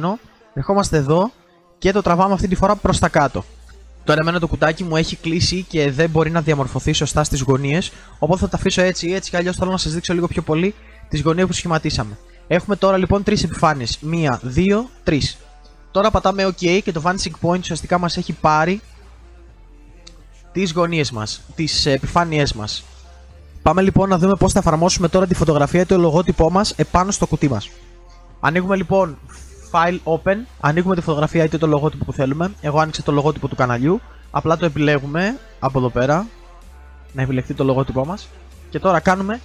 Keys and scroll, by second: 19.6 ctrl+z.